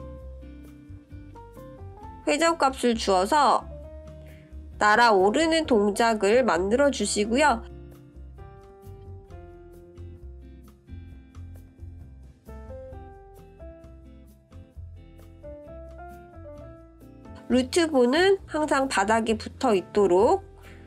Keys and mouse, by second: 1.6 click, 2.9-7.2 drag, 10.3 click, 12.5-16.7 drag, 17.7 click, 18.7-20.8 drag.